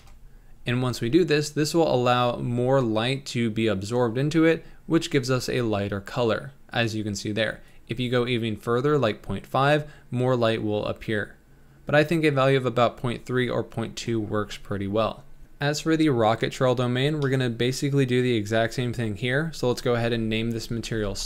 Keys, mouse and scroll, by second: 5.1 scroll down 2, 7.7-11.0 drag, 15.4-21.2 middle drag.